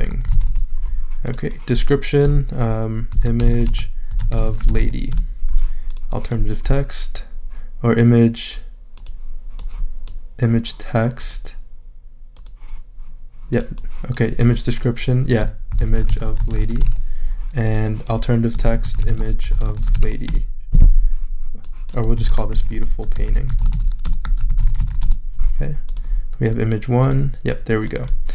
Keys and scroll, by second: 0.0-0.9 typing, 2.9-5.3 typing, 15.5-17.4 typing, 18.5-20.5 typing, 21.9-25.4 typing.